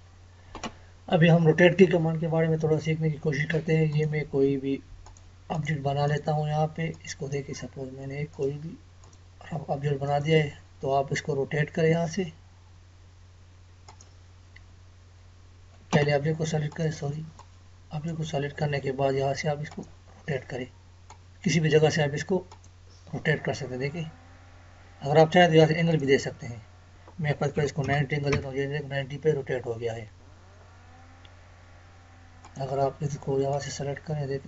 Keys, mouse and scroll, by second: 3.9 click, 10.5 space, 13.9 click, 15.9 Escape, 16.7-22.5 drag, 25.9 click, 32.4 click.